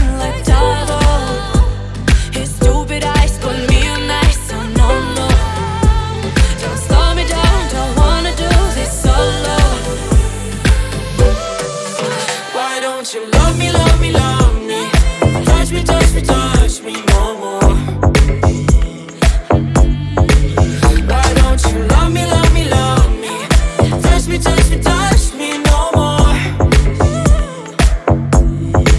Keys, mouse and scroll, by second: 1.5 drag, 3.2 click, 4.8 click, 5.3 middle click, 5.8-6.3 scroll up 2, 6.6-10.5 drag, 10.5-11.6 middle drag, 11.6 click, 12.0-13.2 drag, 13.2 scroll down 3, 13.6 ctrl+a, 18.5-20.3 drag, 20.3 d, 21.0 click, 21.6 s, 23.5-24.1 shift+middle drag, 24.1 click, 24.9-27.0 drag, 28.0 click.